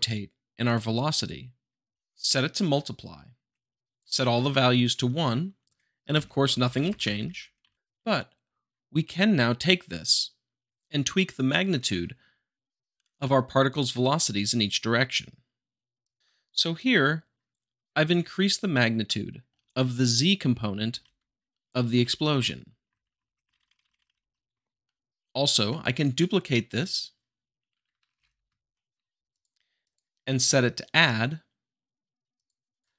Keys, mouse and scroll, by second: 1.1-2.1 drag, 2.2-3.2 shift+middle drag, 3.5-3.9 scroll up 2, 3.9 click, 4.2 1, 4.7 scroll up 2, 4.9 middle click, 6.1 shift+Left, 6.7 Right, 7.6 Left, 16.0 click, 19.0-20.0 shift+middle drag, 20.9 Right, 22.3 Right, 22.8 Left, 23.4 Right, 24.1 Right, 24.8 middle drag, 28.1 d, 28.1 f, 29.2-30.3 drag, 32.3 click.